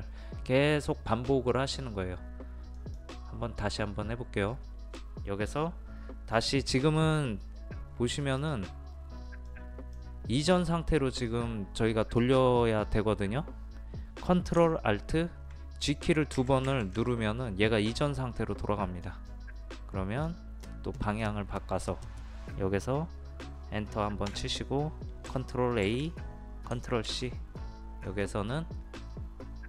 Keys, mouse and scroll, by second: 2.7-13.1 drag, 16.4 ctrl+alt+z, 16.7 ctrl+alt+z, 18.0-22.1 drag, 24.3 Return, 25.9 ctrl+a, 27.1 ctrl+c, 28.0-29.6 drag.